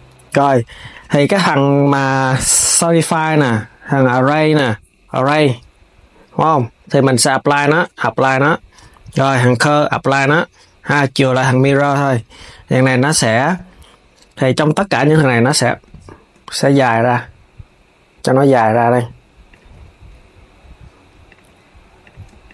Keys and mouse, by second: 0.6 click, 4.6-11.5 drag, 11.5 Tab, 12.1 click, 12.3 KP_3, 14.5 click, 16.3 click, 16.7 g, 19.2 click, 19.5 g, 21.7 click, 22.1 shift+click, 22.4 g.